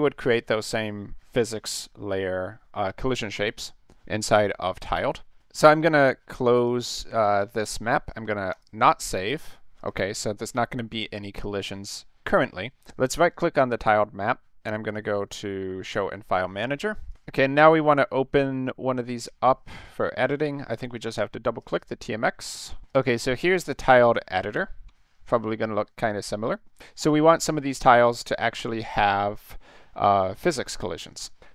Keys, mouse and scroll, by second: 6.5 click, 8.5 click, 9.8 click, 13.7 right click, 15.8 click, 17.1 click, 20.2 click, 21.6 click, 21.8 click, 22.9 click, 23.0 click, 25.0 scroll up 2, 25.7-26.4 ctrl+scroll up 4, 26.4 ctrl+middle click, 28.3-29.5 middle drag.